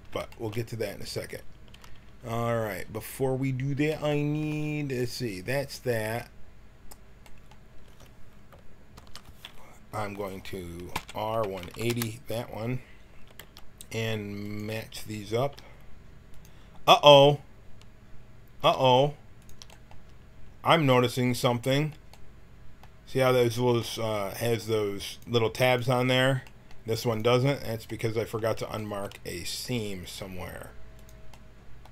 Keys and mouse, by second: 1.7 a, 8.9 l, 10.1-11.9 drag, 10.9 r, 13.4 g, 15.4 g, 18.6-22.0 drag, 18.8 g, 25.1-27.3 right drag, 27.9-28.9 middle drag, 29.2-31.7 middle drag, 31.8 click.